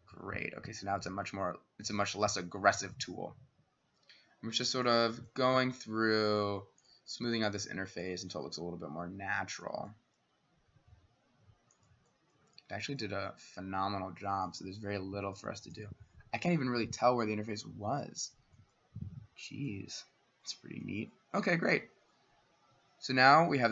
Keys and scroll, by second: 21.7 w.